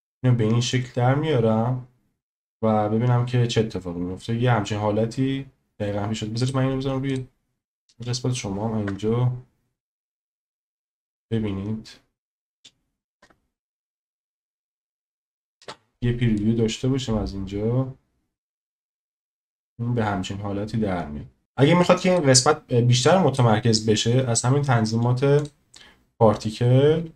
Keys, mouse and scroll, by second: 6.4-7.2 drag, 7.9 space, 8.9 KP_0, 13.2 KP_0, 15.2 click, 15.6 space, 21.4 click, 21.4 space, 23.1 click.